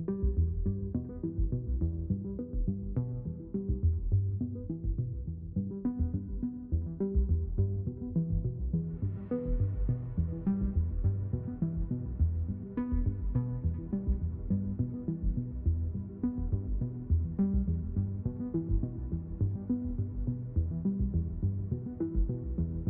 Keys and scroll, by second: 6.6 BackSpace, 7.0 a, 7.3 m, 12.9 m, 13.2 x.